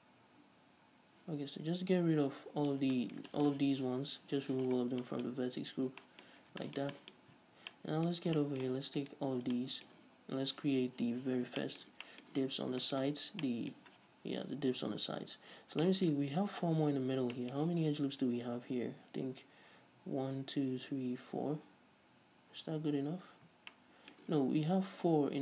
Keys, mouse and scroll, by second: 2.9 Tab, 4.9-5.2 scroll down 2, 5.5-5.8 scroll up 1, 5.8 a, 6.5 scroll up 1, 6.5 scroll down 1, 7.3-7.8 scroll up 1, 9.2-9.7 alt+right drag, 9.7-25.4 shift+middle drag, 13.3 scroll down 2, 14.8-15.3 scroll up 2, 15.3-15.6 scroll down 2, 15.6-15.9 scroll up 2, 18.4-19.1 scroll down 2, 19.1-21.9 scroll up 2.